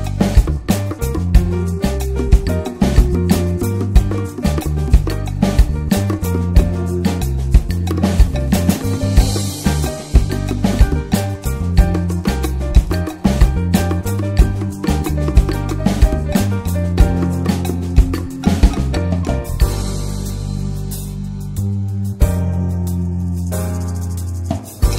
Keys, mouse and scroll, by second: 2.4 click, 2.6-3.6 right drag, 3.6-4.7 drag, 4.8-5.3 drag, 5.3 alt+middle click, 5.7 shift+middle drag, 5.8 shift+scroll up 1, 6.0 s, 7.5-8.2 scroll up 4, 8.2 click, 8.5-9.0 shift+middle drag, 9.0 click, 10.7 ctrl+a, 11.2 Tab, 11.5 middle click, 11.7 Tab, 11.8 click, 12.0 ctrl+a, 12.3 Tab, 12.6 middle click, 13.0 3, 13.1 click, 13.3 shift+middle click, 13.8 ctrl+s, 14.1 shift+click, 14.5 shift+middle click, 15.1 ctrl+s, 15.2 shift+middle click, 16.1 ctrl+b, 20.0 Tab, 20.2 click, 20.5-20.9 alt+middle drag, 20.9 ctrl+s, 21.3 click, 21.5 Tab, 21.9-23.3 shift+middle drag, 23.3 ctrl+s, 23.5 click, 23.9 click, 24.3 l.